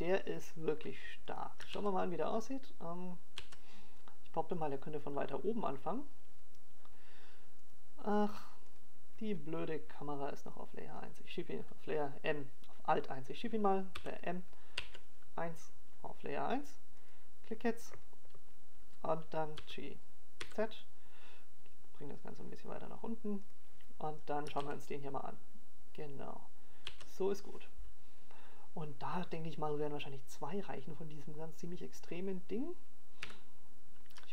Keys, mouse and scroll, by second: 3.4 click, 4.0 click, 7.8 click, 8.2 alt+a, 10.0 alt+a, 11.1 right click, 11.9 right click, 12.2 right click, 14.1 right click, 15.2 click, 17.0 right click, 20.6 m, 23.6 click, 26.2 g, 30.1 click, 30.9 click, 31.2 alt+a.